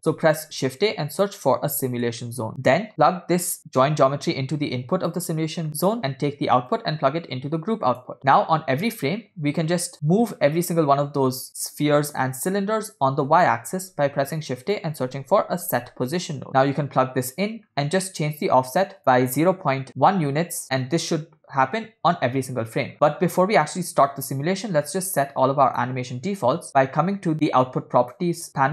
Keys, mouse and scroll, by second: 0.3 shift+a, 3.9-5.2 drag, 5.7 scroll up 3, 5.7 middle click, 6.8-9.1 drag, 9.7 click, 13.9 shift+a, 17.7 scroll up 2, 18.1 middle click, 18.3 scroll up 1, 19.0-20.1 drag, 19.7 0, 22.9-23.3 scroll down 3, 25.7 click, 28.1 click.